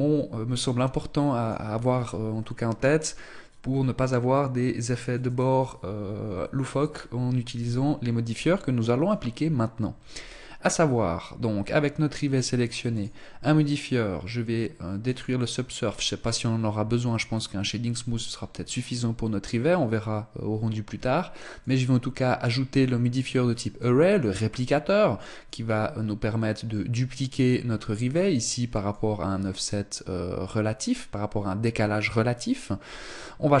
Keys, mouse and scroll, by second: 12.4 click, 14.6 click, 21.1 click, 25.0 click, 28.4 click.